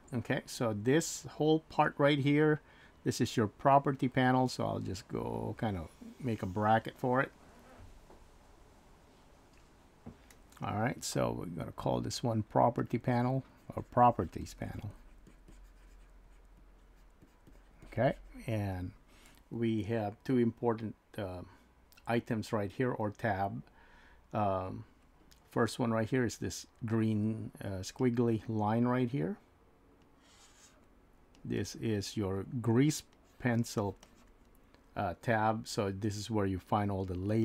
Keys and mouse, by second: 5.0-7.1 drag, 12.8 click, 13.5-17.3 drag, 17.8-21.6 drag, 30.0 click, 31.4-32.6 drag, 33.2 click, 33.8 click.